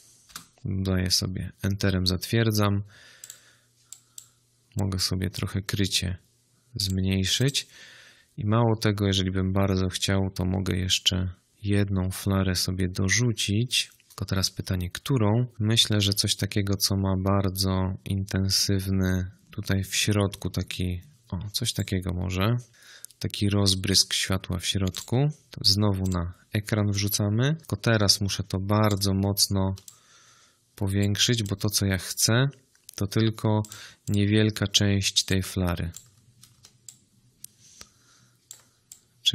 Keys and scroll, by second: 0.1 Return, 21.6 space, 27.5 ctrl+t.